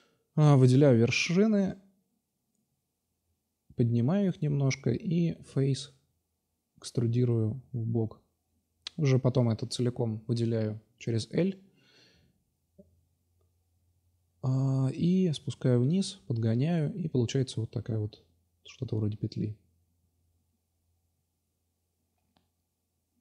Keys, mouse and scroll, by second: 1.3 g, 2.6-3.0 drag, 3.7 middle drag, 5.6 click, 5.9 ctrl+z, 6.1 e, 7.9 l, 8.4 shift+d, 9.9 r, 11.6-15.2 drag, 15.7 click, 17.8 click, 19.7 click, 21.0 click, 21.3 l, 21.7 s, 23.1 click.